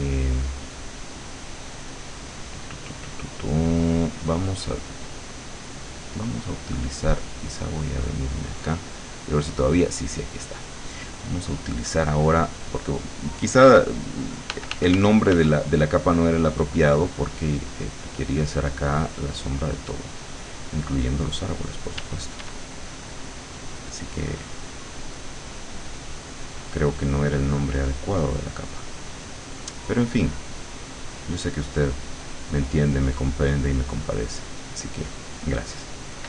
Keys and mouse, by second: 1.8-4.7 drag, 7.2 click, 7.8 click, 8.6 click, 9.8 click, 11.4 right click, 12.6 click, 14.6 f, 16.3-18.6 drag, 19.1-20.5 drag, 22.0 d, 22.8 click, 26.4-28.8 drag, 29.7-31.4 drag, 32.1-35.0 drag.